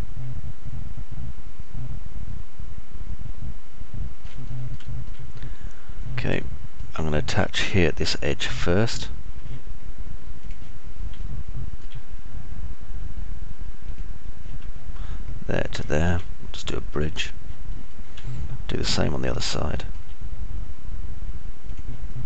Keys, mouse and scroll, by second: 2.4-5.4 alt+drag, 2.4-5.4 alt+right drag, 5.9 click, 5.9 middle click, 5.9 right click, 7.8 alt+middle click, 8.4 middle click, 9.8 middle click, 12.4 alt+middle click, 19.8-21.3 alt+middle drag.